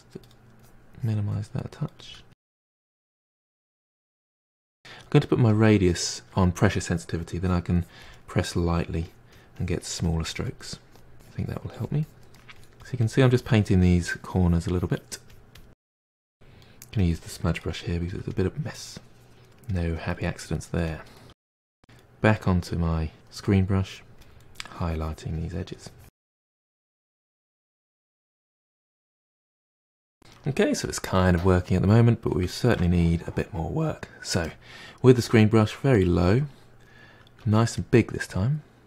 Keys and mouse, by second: 0.9-1.3 middle drag, 1.3-3.9 typing, 1.9-2.4 drag, 2.7-3.0 drag, 3.6-3.9 drag, 4.2-5.5 drag, 7.3-12.6 drag, 12.6 middle click, 12.8-14.3 drag, 14.3 middle drag, 14.5-15.8 drag, 15.8-16.6 middle drag, 16.6 click, 17.0 f, 17.2-18.4 drag, 18.4 middle click, 18.6 f, 18.8-19.7 drag, 19.7-20.1 middle drag, 20.1 f, 20.3 drag, 20.6 middle drag, 20.9 click, 21.1 middle click, 21.3 click, 21.5 f, 22.5 f, 23.8-25.0 drag, 25.0 middle drag, 25.2 click, 25.7 middle drag, 25.9 click, 26.5 middle click, 26.6-28.0 drag, 28.0 middle drag, 28.1-28.8 drag, 28.8 middle click, 28.9-29.5 drag, 29.5 middle drag, 29.7 drag, 29.9-33.4 ctrl+middle drag, 33.4-34.4 drag, 34.4 f, 35.5 middle drag, 35.8-36.3 drag, 36.3 f, 36.7-38.8 drag.